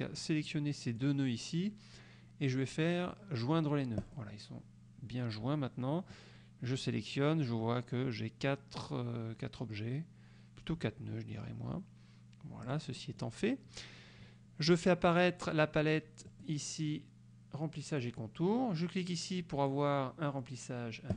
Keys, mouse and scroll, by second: 0.3-1.3 drag, 4.1 click, 6.2-7.1 drag, 12.7 click, 16.3 click.